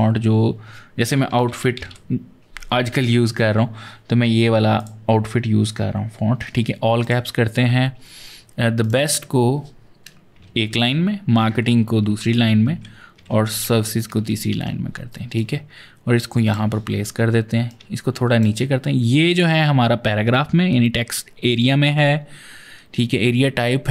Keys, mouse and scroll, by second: 1.2-1.7 typing, 4.6 click, 6.8 click, 8.6 click, 8.8 double click, 10.3 shift+Right, 10.6 Return, 11.2 Right, 11.3 Right, 11.4 Right, 11.7 Right, 11.8 Right, 11.9 Right, 12.1 Right, 12.2 Right, 12.4 Right, 12.6 Right, 13.1 shift+Left, 13.5 Return, 14.1 ctrl+Return, 15.2 click, 17.5 click.